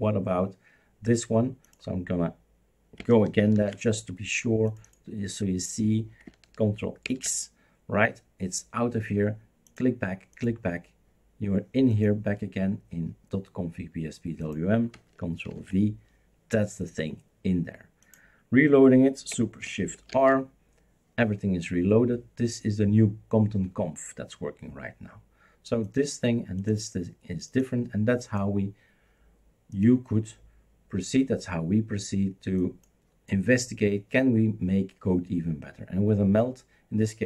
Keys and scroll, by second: 3.5 ctrl+h, 7.0 ctrl+x, 15.5 ctrl+v, 20.1 shift+super+r.